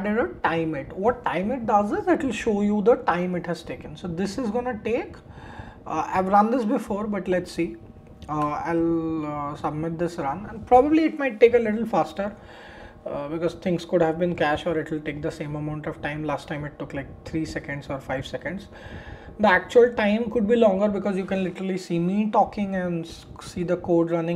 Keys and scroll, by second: 8.3 shift+Return.